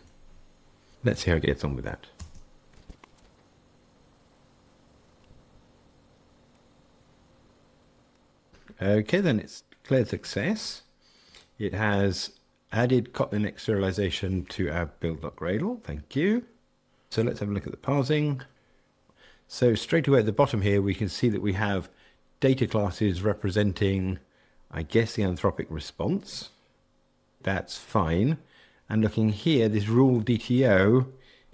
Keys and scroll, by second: 18.5 shift+super+F12.